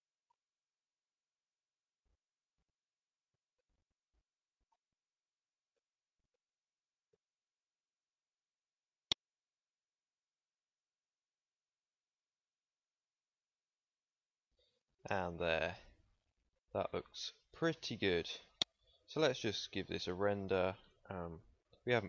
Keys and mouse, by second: 0.2 u, 4.2 Tab, 4.9 middle click, 5.6 z, 6.2 z, 7.1 z, 7.5 z, 17.5 ctrl+s, 18.8 ctrl+s.